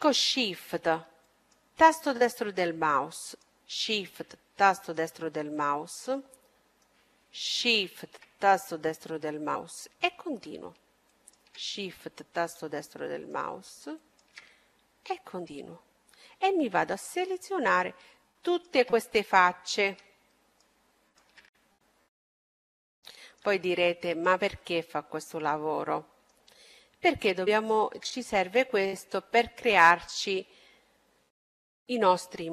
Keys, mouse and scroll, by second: 1.0-2.8 right drag, 2.1-6.0 middle drag, 5.3-7.4 right drag, 7.1-8.9 middle drag, 9.1-11.0 right drag, 9.8-10.9 middle drag, 11.0-12.6 middle drag, 12.0-13.9 right drag, 13.2-16.7 middle drag, 15.6-18.4 right drag, 17.2-20.4 middle drag, 18.4 right click, 20.4-22.9 right drag, 21.5-23.3 middle drag, 24.0-25.7 right drag, 24.5-27.4 middle drag, 27.4-29.2 right drag, 28.1-30.0 middle drag, 29.3 right click.